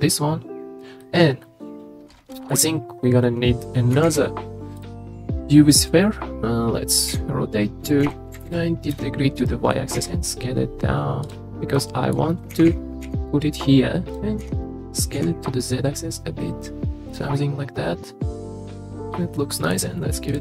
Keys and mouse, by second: 1.0-2.5 drag, 4.0 shift+a, 7.1 r, 8.0 y, 8.4 KP_9, 8.4 KP_0, 8.9 KP_Enter, 10.0 s, 11.7-12.1 middle drag, 12.5 g, 12.6 y, 13.0 x, 14.4 s, 15.2 x, 17.1 click, 17.4-19.2 middle drag, 19.7-20.4 middle drag.